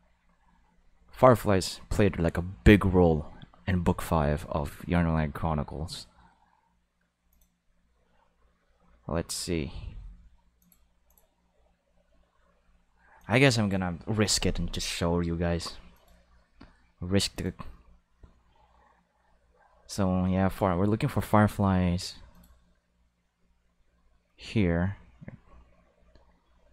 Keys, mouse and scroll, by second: 7.3 click, 10.6 click, 11.1 click, 13.2 click, 15.9 click.